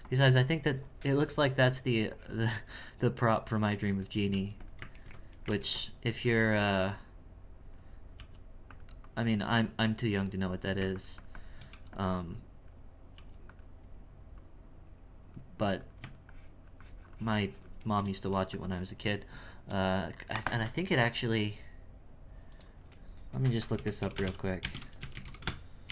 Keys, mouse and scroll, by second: 0.0-4.3 drag, 5.0-6.4 ctrl+middle drag, 6.9-8.1 drag, 9.0-11.7 drag, 12.3 click, 14.4-17.8 drag, 17.8 shift+middle click.